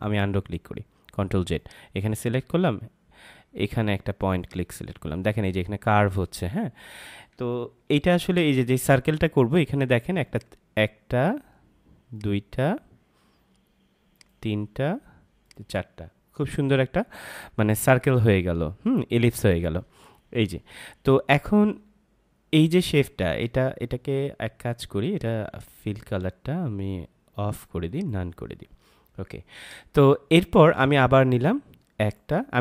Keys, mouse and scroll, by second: 1.5 click, 4.3 click, 7.8 ctrl+z, 10.2 click, 25.1 click, 27.9 click.